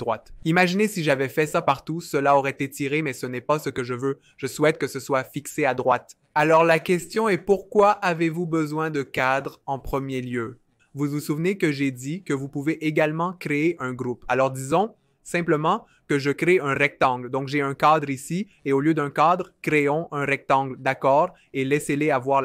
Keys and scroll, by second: 13.8 f, 17.5 typing, 19.3 super+z, 19.8 r.